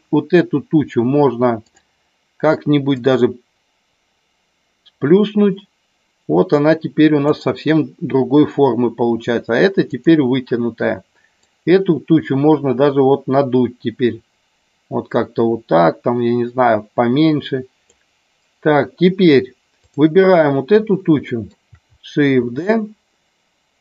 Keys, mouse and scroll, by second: 1.6 click, 2.9-7.3 drag, 9.8 click, 11.4-17.9 drag, 19.9 click, 21.1 shift+middle click, 22.4 shift+d.